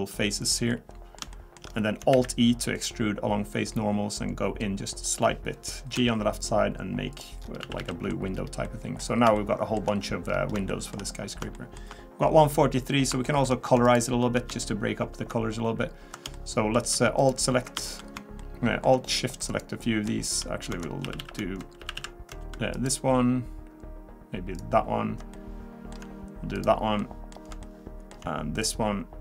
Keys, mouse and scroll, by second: 0.7 middle click, 1.7-2.1 scroll up 2, 2.1 alt+e, 6.0 g, 7.4 scroll down 3, 7.6 a, 7.8 a, 7.9 middle click, 8.4-8.7 scroll down 1, 8.7 middle click, 9.0 scroll down 2, 9.4 shift+middle click, 10.3-10.7 scroll up 3, 10.7 shift+middle click, 11.0-11.3 scroll up 1, 11.5 shift+middle click, 13.4 shift+middle click, 13.8 alt+click, 16.3 shift+middle click, 17.2 alt+click, 18.4 shift+middle click, 19.5 alt+shift+click, 20.2 shift+click, 21.8 a, 21.9 a, 22.7 alt+shift+click, 25.3 shift+middle click, 26.5 alt+shift+click, 27.0 alt+shift+middle click, 27.6 shift+middle click, 28.6 alt+shift+click.